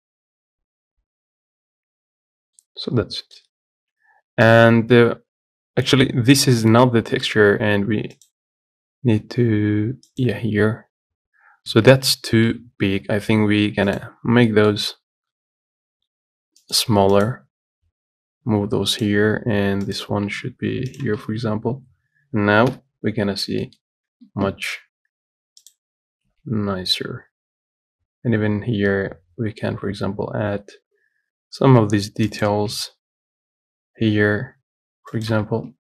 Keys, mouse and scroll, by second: 2.1 Tab, 2.6 scroll down 1, 2.8-4.0 middle drag, 4.0 Tab, 8.5-11.9 drag, 11.9 a, 21.7 scroll up 3, 22.2-22.9 scroll down 2, 22.9 KP_Decimal, 23.5 scroll down 2, 23.9 middle click, 24.1 scroll up 1, 24.5 Tab, 26.5 s.